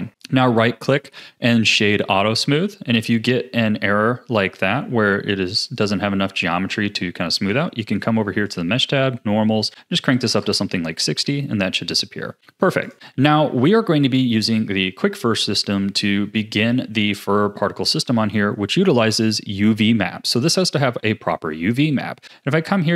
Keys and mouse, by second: 0.1-1.7 drag, 5.6 click, 8.5 click, 8.6-9.6 middle drag, 9.6 click, 11.2 a.